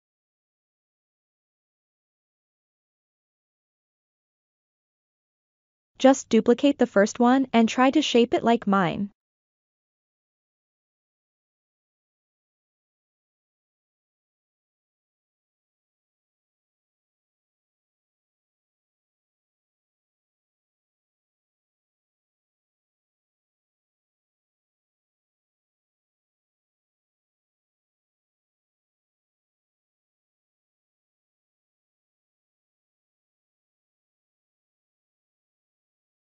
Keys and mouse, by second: 0.6-1.4 ctrl+middle drag, 1.9-2.4 shift+middle drag, 5.4 shift+d, 8.2-8.6 middle drag, 9.0-9.7 ctrl+middle drag, 10.0 shift+middle click, 11.6 click, 12.5 Tab, 14.2-14.6 drag, 15.2 click, 16.8 right click, 20.4 right click, 21.6 click, 22.5 click, 24.7-25.2 drag, 25.7-27.7 drag, 28.1 click, 29.4 click, 30.8 click, 33.9 r, 34.7-35.8 drag, 36.1 click.